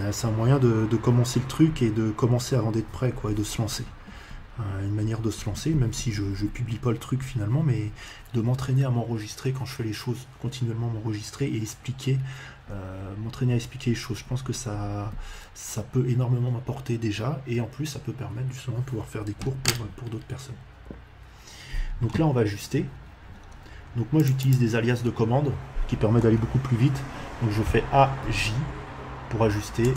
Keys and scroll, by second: 27.6 a, 28.2 j, 29.8 space.